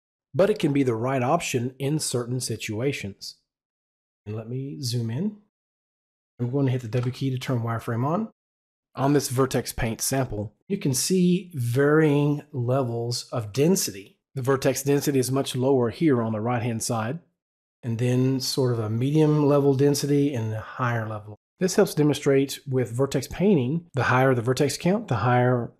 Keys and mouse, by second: 8.0 w, 22.7 w.